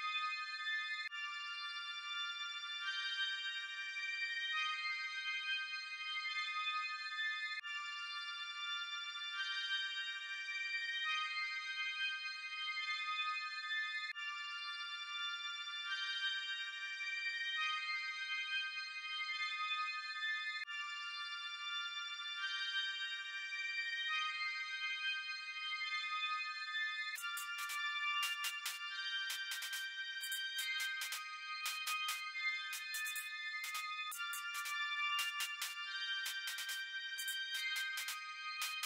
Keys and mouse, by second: 0.6 click, 2.1 click, 6.3 click, 7.8 click, 25.9 click.